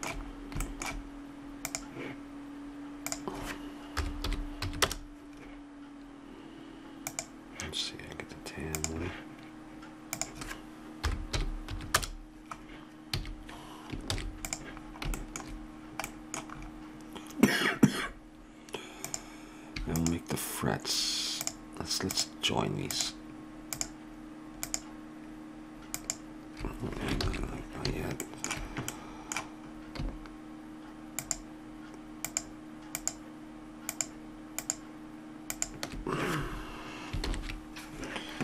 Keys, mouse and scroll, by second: 1.7-4.9 drag, 7.1-12.0 drag, 13.2 a, 14.1 ctrl+s, 27.3 ctrl+z, 31.1-37.2 drag, 37.2 ctrl+j.